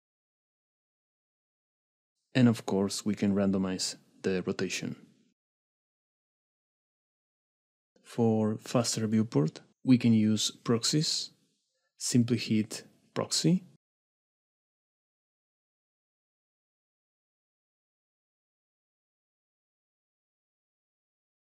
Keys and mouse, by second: 2.9 click, 4.3 click, 4.4 middle click, 5.4-7.2 shift+middle drag, 12.3 click, 15.9 shift+middle drag, 16.4 middle click, 17.5 middle click, 18.2 click, 19.2-19.5 middle drag, 20.0 middle drag.